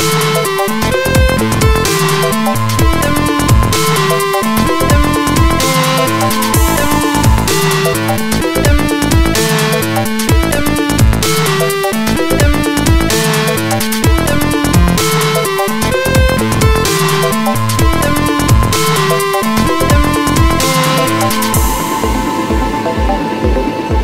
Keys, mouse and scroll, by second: 2.2 scroll up 1, 4.3 middle click, 5.1 middle click, 5.2-6.2 scroll down 1, 6.8 middle click, 9.9 F3, 11.0 Delete, 12.6 alt+middle click, 13.6 F4, 18.8 click, 19.0 click, 19.7 alt+middle click, 22.4 alt+middle click.